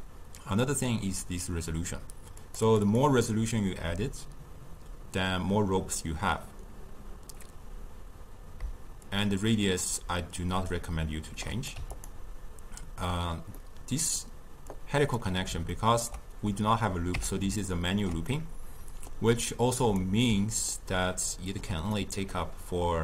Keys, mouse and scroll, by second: 0.7 click, 2.4-5.9 drag, 9.1-12.1 shift+drag, 13.6-14.8 middle drag, 14.8 click, 15.8-17.2 ctrl+middle drag, 17.2 Tab, 17.6-19.8 ctrl+middle drag, 19.8-20.8 drag, 20.8-23.0 ctrl+middle drag.